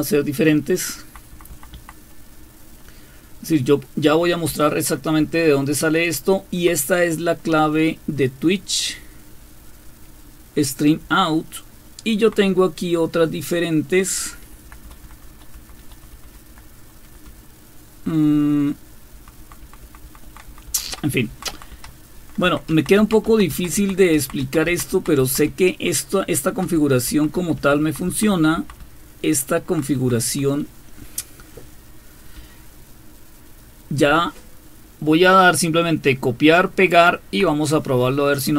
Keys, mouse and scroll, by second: 1.5 Left, 1.9 Left, 2.4-3.4 Right, 4.5 Down, 5.2 Left, 5.9 Left, 6.2-7.4 Left, 7.4 Right, 8.1 Right, 11.0-12.4 Down, 14.2 Up, 14.4 Up, 14.6 Up, 14.8 Up, 15.0 Up, 15.5 Up, 15.8 Up, 16.0 Up, 16.2 Up, 16.5 Up, 17.0 Up, 17.3 Up, 19.1 Down, 19.4 Down, 19.6 Down, 19.8 Down, 21.1 Down, 21.7 Down, 22.4 Down, 22.7 Down, 23.0 Down, 23.3 Down, 23.5 Down, 23.8 Down, 24.1 Down, 24.4 Down, 24.7 Down, 24.9 Down, 25.2 Down, 25.5-26.7 Down, 27.1 Down, 27.4 Down, 27.6 Down, 27.8 Down, 28.1 Down, 28.3 Down, 28.6 Down, 28.8 Down, 29.4 Down, 29.6-32.4 Down, 32.4 Up, 33.0-37.5 Up.